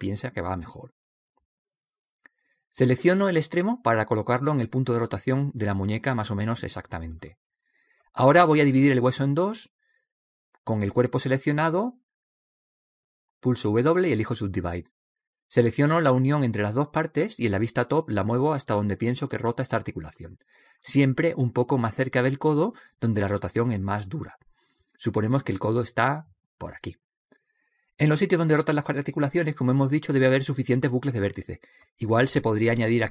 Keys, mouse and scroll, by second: 4.5 right click, 5.3 click, 7.3 click, 8.6 middle click, 9.0 click, 9.0 right click, 9.8 w, 15.7 right click, 16.8 middle click, 17.1 click, 17.1 right click.